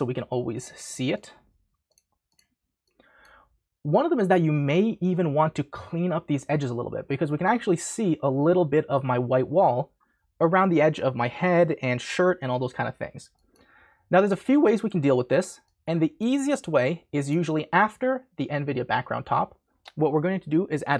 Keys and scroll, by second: 0.0-1.0 typing.